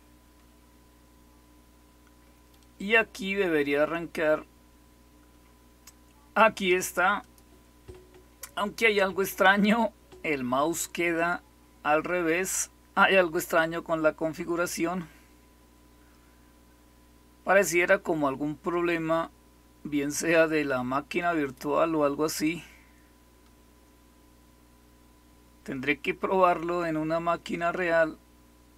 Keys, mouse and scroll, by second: 7.1 click.